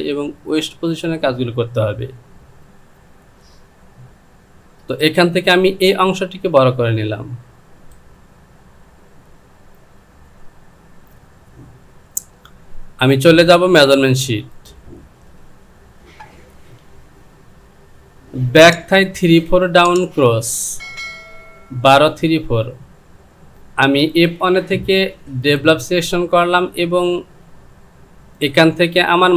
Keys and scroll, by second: 5.0 Return.